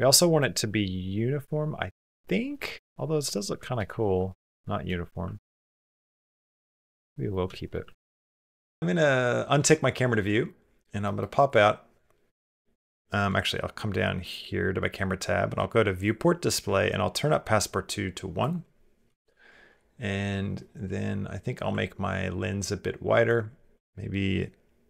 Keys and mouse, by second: 0.4 middle click, 0.5 click, 0.5 middle click, 0.7 click, 0.9-2.3 middle drag, 2.5 ctrl+click, 2.9 middle click, 3.4 shift+middle click, 3.7 ctrl+middle click, 4.1 middle click, 4.5 shift+middle click, 5.1 ctrl+middle click, 5.4-7.1 middle drag, 7.3 shift+middle click, 7.7 ctrl+middle click, 8.0 middle click, 8.4 shift+middle click, 10.1 middle click, 10.9 click, 10.9 middle click, 11.3 click, 12.1 KP_0, 15.8 click, 18.2 click, 23.2-24.8 drag.